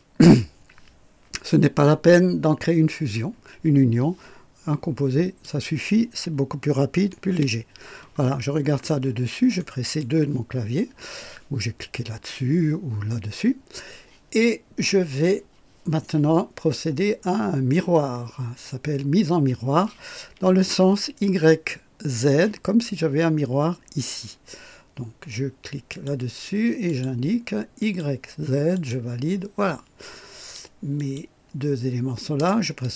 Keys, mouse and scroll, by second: 5.4 click, 7.3 KP_2, 8.3-8.6 scroll up 1, 9.1 scroll up 1, 9.5 right click, 25.9 click, 26.8 click, 27.8 click, 28.7 click, 31.0 click.